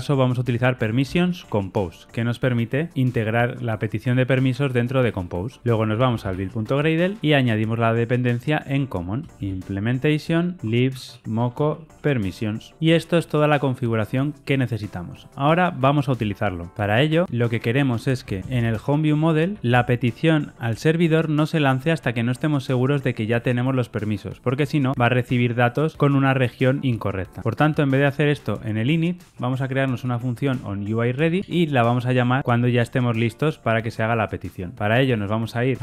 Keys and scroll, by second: 10.6 Return, 11.4 Return, 31.4 Tab.